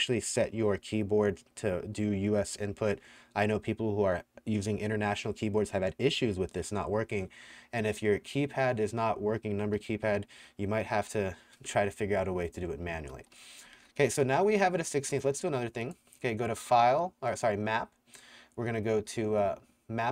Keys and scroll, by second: 12.5-14.8 typing.